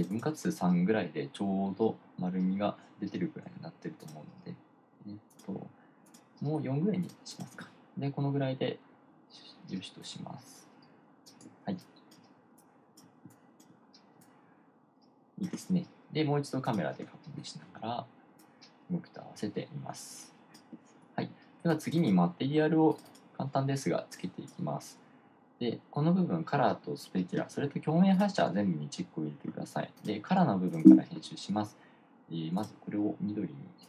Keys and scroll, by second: 12.3-15.7 typing.